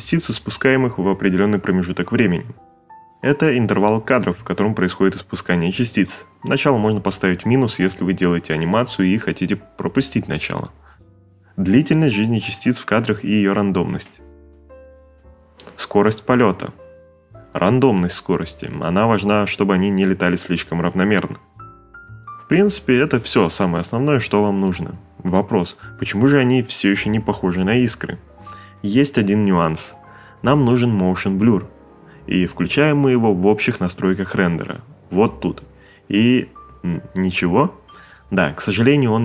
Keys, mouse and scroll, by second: 3.7 click, 5.1 Return, 6.5 space.